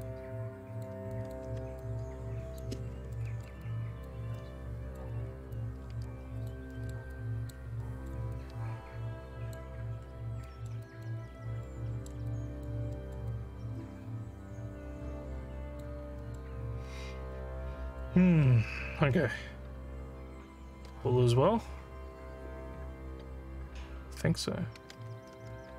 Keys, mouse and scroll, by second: 0.1 alt+click, 1.2 alt+click, 1.9 ctrl+click, 3.2 alt+middle click, 3.7 alt+click, 4.4 alt+middle click, 5.3 scroll down 2, 5.6 alt+click, 6.7 alt+middle click, 7.1 alt+click, 7.9 alt+middle click, 8.4-9.5 alt+drag, 10.5 alt+middle click, 10.9 alt+click, 11.4 alt+scroll down 1, 11.7 alt+middle click, 12.3 alt+click, 13.0 alt+middle click, 13.4-15.8 alt+drag, 16.3 alt+middle click, 17.4 alt+middle click.